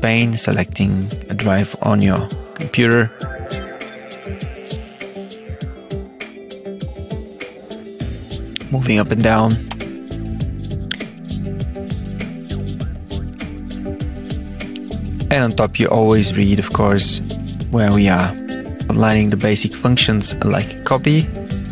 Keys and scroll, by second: 0.5 Escape, 1.9 alt+F2, 3.8 Return, 4.8 Return, 6.6 Down, 7.1 Up, 9.6 Return, 11.2 Down, 12.1 Tab, 12.9 Down, 13.6 Down, 14.3 Return.